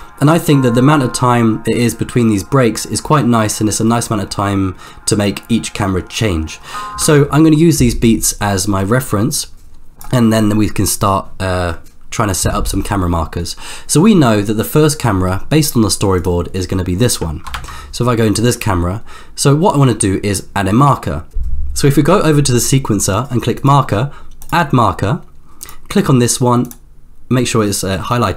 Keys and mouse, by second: 7.0 space, 7.7-10.2 drag, 17.7 ctrl+KP_0, 23.6-24.7 drag, 26.1 click.